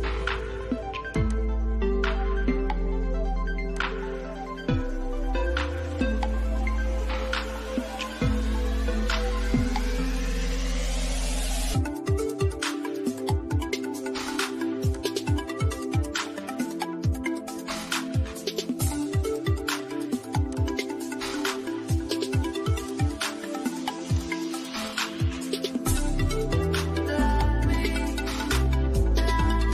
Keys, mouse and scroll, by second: 0.3 click, 3.0 click, 3.7-4.4 scroll down 1, 5.1-6.8 drag, 6.8 scroll down 1, 8.9 scroll up 1, 9.4 click, 14.2 click, 18.1 click, 22.5 scroll down 1, 23.4 click.